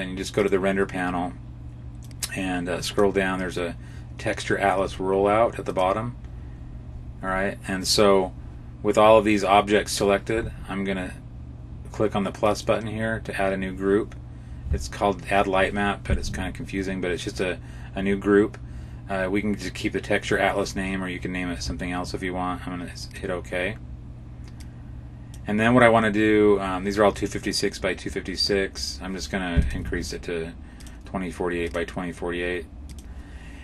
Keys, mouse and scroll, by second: 0.2 click, 1.9 click, 5.5 click, 6.4-7.7 scroll down 9, 12.3 click, 24.5 click, 29.5 click, 31.5 click.